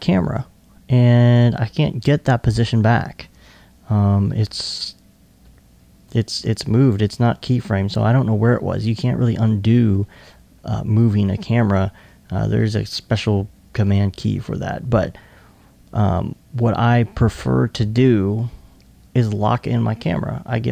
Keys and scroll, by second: 4.1 1.